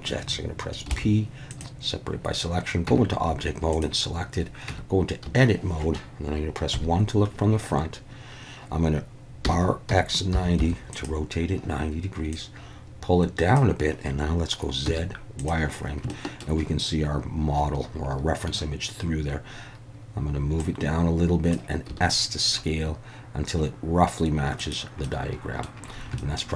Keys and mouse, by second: 0.9 p, 2.9 Tab, 3.7 click, 4.7 Tab, 5.3 a, 6.7 KP_1, 9.4 r, 9.9 x, 10.3 9, 10.6 0, 10.9 click, 12.3-13.6 drag, 14.9 z, 16.1 shift+middle click, 20.6 click, 21.9 s, 24.6 click, 25.1 middle click, 26.2 shift+middle click.